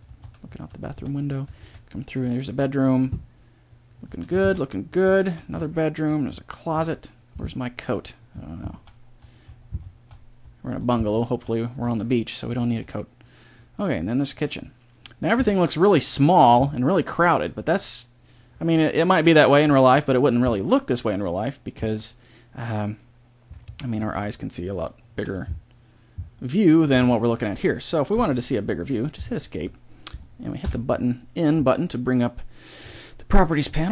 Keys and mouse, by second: 30.6 n, 33.8-33.9 middle drag.